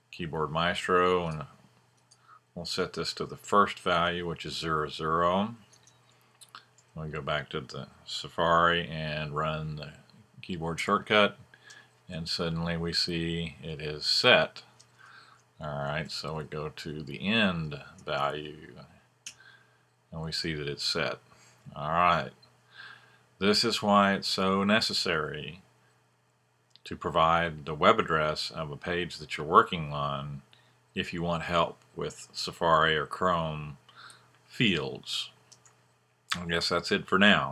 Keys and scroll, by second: 2.8 BackSpace, 3.8 0, 5.7 super+Tab, 10.8 F1, 14.9 super+Tab, 16.8 5, 17.8 super+s, 17.9 super+Tab, 19.2 F1.